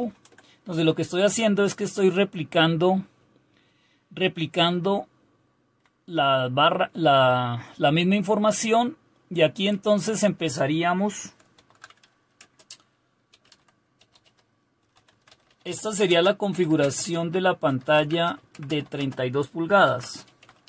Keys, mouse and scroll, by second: 0.0 ctrl+u, 3.9-5.7 Up, 8.1-9.7 Down, 9.7 Up, 10.2 Return, 11.5-20.6 typing.